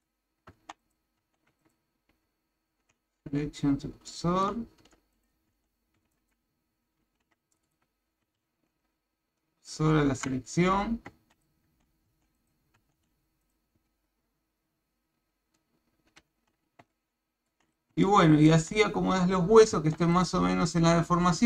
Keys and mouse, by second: 0.6 Tab, 0.8 click, 1.2 Tab, 2.2 shift+s, 4.1 shift+middle click, 4.8 Tab, 5.2 click, 5.5 Tab, 6.0 b, 8.4 shift+s, 11.2 Tab, 11.3 click, 11.7 Tab, 12.3 click, 13.4 click, 13.9 shift+s, 16.9 shift+middle click, 18.0 shift+middle click, 19.7 Tab.